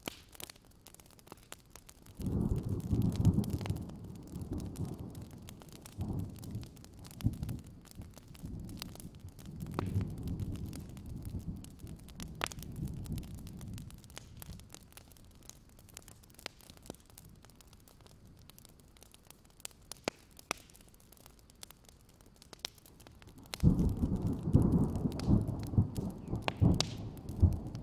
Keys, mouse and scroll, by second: 0.3 alt+scroll down 1, 0.4-1.8 scroll up 1, 1.8 click, 3.5-4.1 scroll up 2, 4.2 alt+scroll down 1, 5.0 click, 5.2-5.7 scroll up 1, 5.7 click, 5.8 scroll up 1, 6.5 click, 7.8 alt+scroll down 1, 8.1 alt+scroll up 1, 8.5 click, 8.9 alt+scroll down 1, 9.0 scroll up 1, 10.0 alt+scroll up 1, 10.3 alt+z, 10.5 alt+scroll up 1, 11.0 click, 11.3 alt+scroll down 1, 11.5-12.2 scroll up 1, 12.2 click, 12.3-12.9 scroll up 1, 12.9 right click, 13.6 click, 13.8 scroll up 1, 14.1 click, 14.4-16.1 scroll up 3, 16.1 click, 17.4-18.0 alt+scroll up 1, 18.0 click, 18.9 ctrl+z, 19.2 click, 20.0-20.5 scroll down 3, 20.5 alt+scroll up 1, 20.8 alt+scroll down 1, 21.0 scroll up 1, 22.2 click, 22.5-23.5 alt+scroll up 1, 23.5 click, 23.6 alt+scroll down 1, 23.9 alt+scroll up 1, 24.4-25.5 drag, 25.7 alt+scroll down 1, 25.8-26.3 scroll up 2, 26.7 click, 26.8-27.5 scroll up 1, 27.5 click.